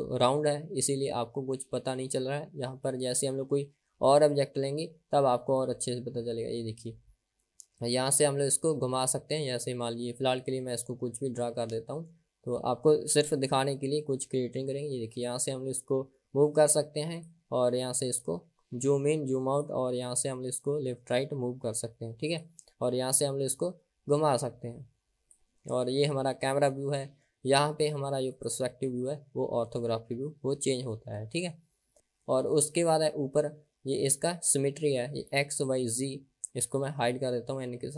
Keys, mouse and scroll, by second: 5.7 click, 9.3 click, 10.6-11.8 drag, 13.3 click, 16.3-17.5 drag, 18.4-19.9 drag, 20.2-22.6 drag, 23.2 click, 23.5-25.6 drag, 28.5 click, 30.8 click, 37.0 n.